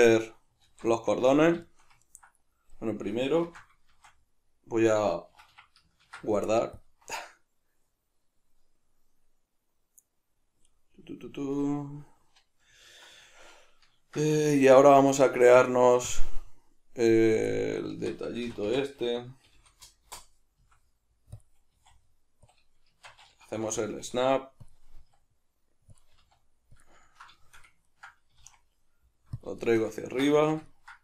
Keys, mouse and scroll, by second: 0.6 alt+q, 3.4 shift+c, 3.9 shift+a, 5.4 Escape, 6.0 ctrl+s, 14.5 shift+a, 17.5 shift+middle click, 17.9 Tab, 18.5 r, 20.1 Return, 20.6 s, 21.1 middle click, 21.4 click, 21.7 s, 22.5 click, 22.9 shift+Tab, 23.6 g, 24.7 click, 25.0 s, 26.0 click, 26.2 g, 26.8 click, 27.0-29.4 ctrl+middle drag, 28.3 s, 29.4 drag, 29.6-31.0 shift+middle drag.